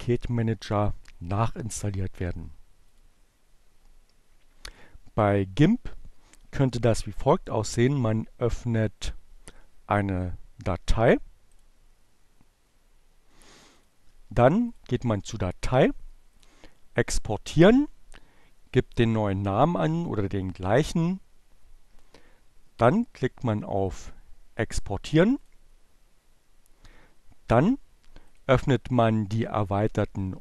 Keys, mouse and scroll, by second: 1.6-4.2 drag, 6.5 right click, 9.3-11.1 drag, 13.1 click, 14.1 click, 14.2 middle click, 15.6 click, 17.8 click, 18.8 2, 23.4 click, 26.5 click.